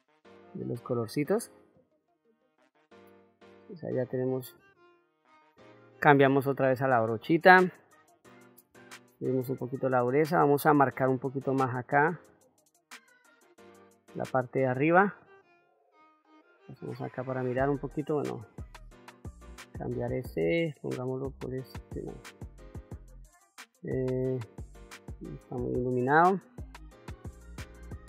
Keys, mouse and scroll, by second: 1.8 click, 2.9-4.0 middle drag, 5.8 click, 6.7 middle click, 8.4 shift+f, 9.7 shift+f, 11.2 click, 11.8-13.6 drag, 13.7 middle click, 14.9 click, 18.3-28.0 drag.